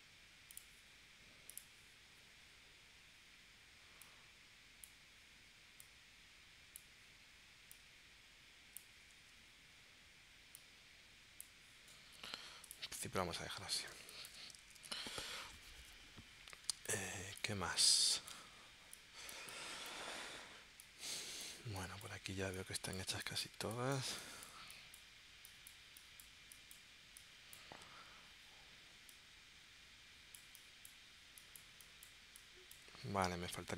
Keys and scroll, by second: 9.3 super+z, 13.9 space, 16.7 space.